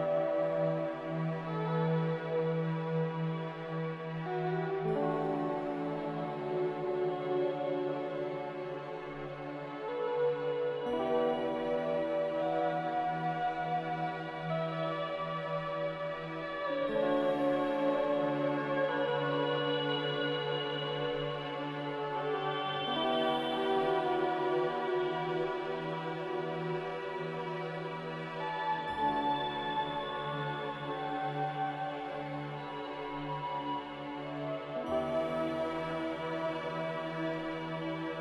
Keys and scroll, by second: 11.6 z, 18.3-19.1 typing, 34.5-35.4 typing.